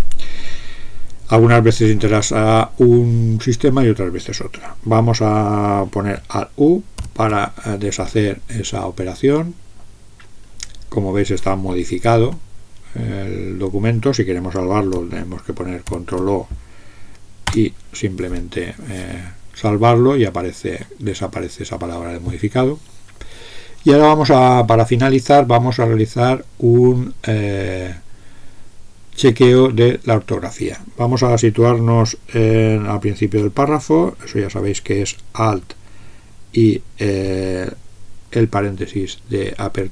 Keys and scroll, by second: 7.0 alt+u, 12.2 Up, 15.8 ctrl+o, 17.5 Return, 39.6 alt+(.